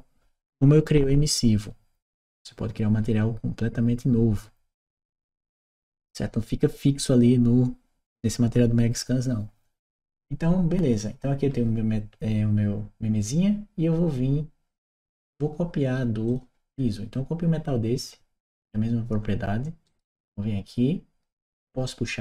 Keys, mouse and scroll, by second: 16.1 click, 19.7 click, 21.5 click.